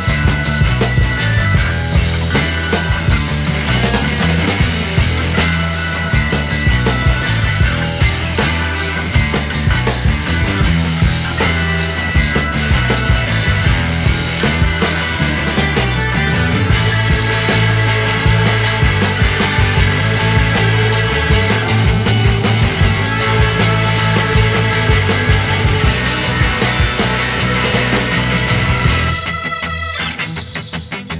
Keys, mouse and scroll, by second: 0.5-1.5 drag, 1.9-5.6 drag, 6.2 click, 7.5-10.0 drag, 10.0-10.9 middle drag, 10.9-11.6 scroll up 2, 11.6 KP_1, 14.5-16.4 drag, 16.4-16.9 scroll down 4, 16.9 ctrl+z, 17.5 ctrl+click, 18.4 shift+d, 19.0 g, 20.8-21.6 scroll down 2, 21.6 shift+d, 22.1 g, 24.3 shift+d, 24.7 g, 26.0 g, 27.8 shift+d, 28.3 g, 29.2 click, 29.6-31.1 middle drag.